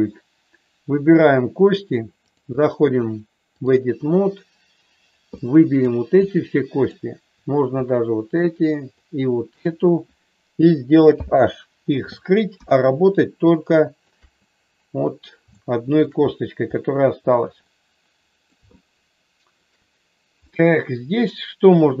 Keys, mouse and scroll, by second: 1.1 click, 2.2-3.7 drag, 5.3 middle click, 6.1 click, 7.9 shift+click, 8.9 shift+click, 11.1 h, 12.4 KP_1, 13.4 shift+middle click, 15.6 shift+middle click, 17.7 middle click, 18.8 shift+middle click, 20.4-22.0 middle drag.